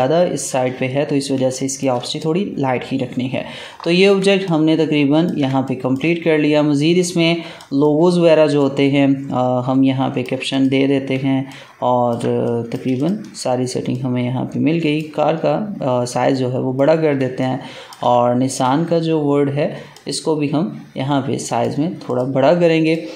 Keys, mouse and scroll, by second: 0.8-1.2 scroll down 1, 1.3 space, 1.4 click, 1.8 space, 2.0 click, 4.2 ctrl+space, 4.4 ctrl+click, 4.6 ctrl+space, 5.6 click, 6.3-7.2 alt+scroll down 1, 7.3 space, 7.5 click, 11.1 ctrl+space, 11.4 ctrl+click, 11.6 ctrl+space, 12.4 click, 12.8 space, 12.9 click, 17.2 ctrl+space, 17.3 ctrl+click, 17.6 ctrl+space, 18.4 click, 19.8 click.